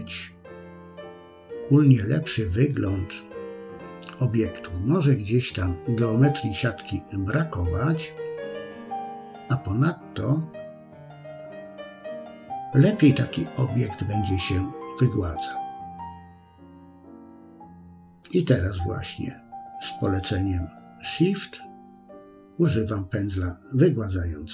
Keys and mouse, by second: 2.6-6.7 middle drag, 7.0 middle click, 8.7 shift+click, 9.0 shift+click, 9.3 shift+click, 9.5 shift+click, 9.9 shift+click, 10.4 shift+click, 11.5 shift+click, 12.0 shift+click, 12.2 shift+click, 12.8 middle click, 13.8 shift+click, 14.0 shift+click, 14.5 shift+click, 14.8 shift+click, 15.1 shift+click, 16.1 shift+click, 16.5 shift+click, 17.0 middle click, 17.7 shift+middle click, 18.7 shift+click, 19.4 shift+click, 19.8 shift+click, 20.3 middle click, 21.2 shift+click, 21.6 shift+click, 23.1 middle click, 23.8 shift+click.